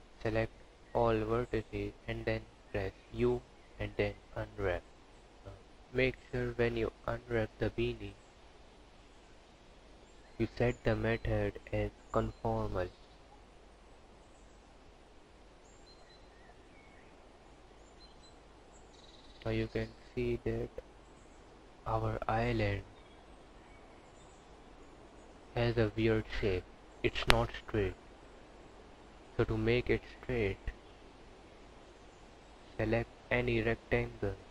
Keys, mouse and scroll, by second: 1.5 u, 5.5 a, 7.2 u, 9.3 click, 12.5 click, 28.3 KP_Decimal, 29.2-30.1 scroll down 10, 30.4 scroll up 2, 31.3 scroll down 2, 32.3 click.